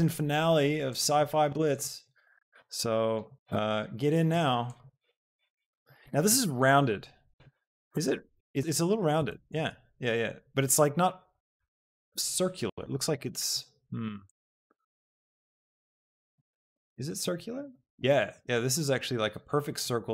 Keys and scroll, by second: 2.7 alt+s, 4.2 s.